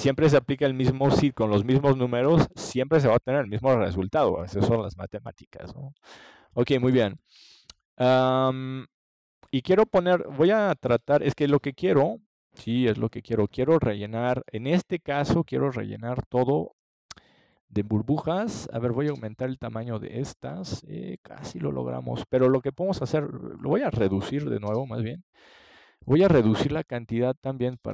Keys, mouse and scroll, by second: 0.4 click, 1.4-4.4 middle drag, 4.4 click, 8.7 KP_0, 8.8 KP_0, 10.3-12.0 middle drag, 14.8 ctrl+s, 16.2 click, 22.7-25.6 drag, 26.8 ctrl+j, 27.7-27.9 drag.